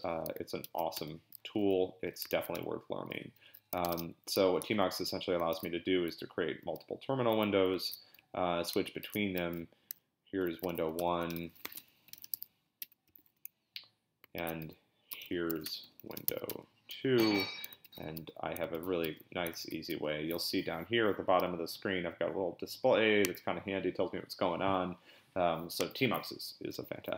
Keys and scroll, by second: 0.6 ctrl+x, 0.9 c, 2.3 ctrl+b, 2.5 c, 3.8 ctrl+a, 3.9 p, 4.6 BackSpace, 5.5 ctrl+b, 6.6 p, 7.9 ctrl+b, 8.2 n, 9.0 ctrl+b, 9.4-13.1 typing, 14.3-19.9 typing, 17.8 ctrl+b, 18.7 ctrl+b, 19.6 ctrl+b.